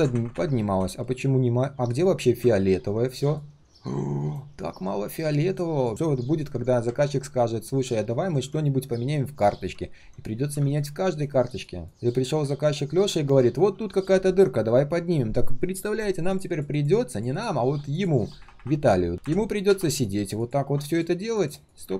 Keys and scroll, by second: 0.9 ctrl+shift+3.